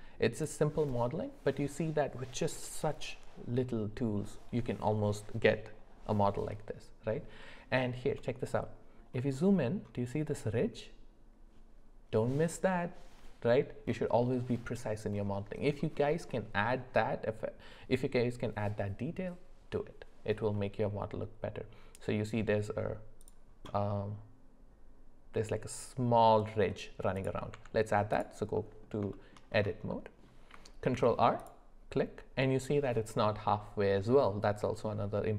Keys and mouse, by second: 0.3 click, 27.2 click, 27.5 Tab, 28.5 middle click, 29.1 shift+middle drag, 29.9 middle click, 30.8 ctrl+r.